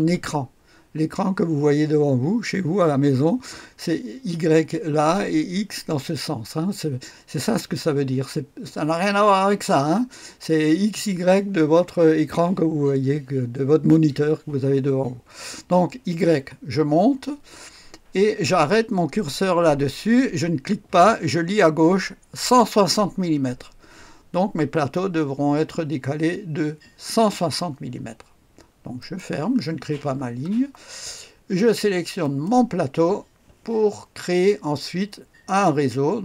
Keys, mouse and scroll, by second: 17.1-29.0 scroll up 2, 29.0 click, 29.6-30.9 scroll down 2, 30.9-32.9 drag.